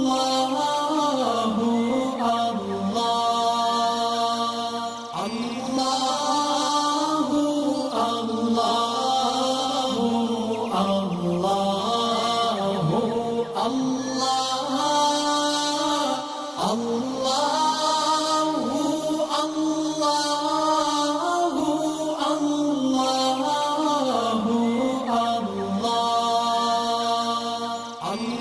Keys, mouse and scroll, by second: 6.8 click, 10.0 click, 14.8 click, 17.5 click, 25.6-28.4 drag.